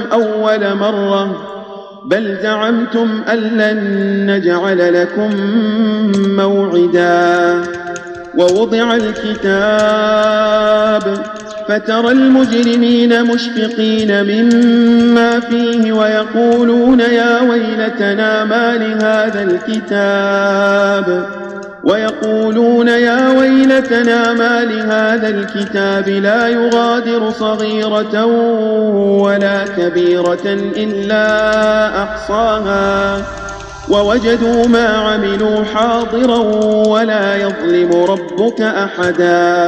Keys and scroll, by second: 5.1 ctrl+a, 8.4 space, 9.7 space, 10.9 space, 12.5 space, 14.4 space, 18.9 space, 19.6 space, 22.0 space, 23.6 space, 24.2 space, 25.4 space, 26.6 space, 27.8 space, 30.2 space, 31.4 space, 34.6 space, 36.2 space, 36.7 space, 37.8 space.